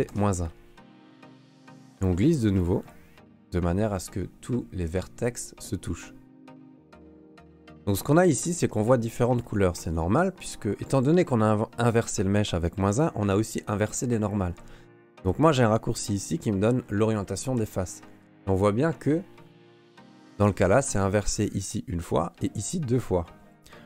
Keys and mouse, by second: 1.3 g, 4.8 shift+middle click, 6.0 middle click, 6.9 shift+middle click, 7.8 a, 8.2 a, 8.8 click, 9.3 a, 15.1 q, 19.7 middle click.